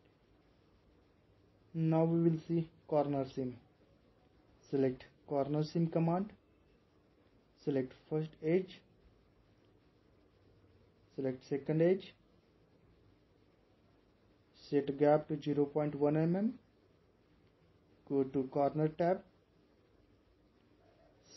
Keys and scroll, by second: 2.0 typing, 16.8-17.6 typing.